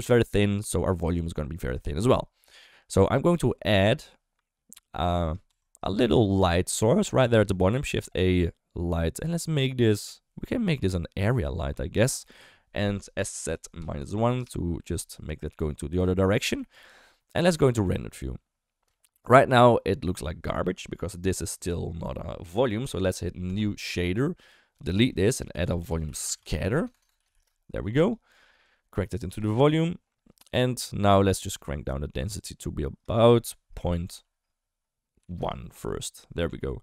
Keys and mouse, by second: 2.2 middle click, 2.6 shift+middle click, 3.3 middle click, 5.5 Tab, 7.6 shift+a, 12.0 shift+middle drag, 13.2 s, 16.5 KP_1, 18.9 shift+middle drag, 21.2 click, 25.0 ctrl+x, 25.3 shift+a, 26.9 BackSpace, 27.1 BackSpace, 28.7 click, 31.6-32.6 shift+drag, 33.1-35.4 drag.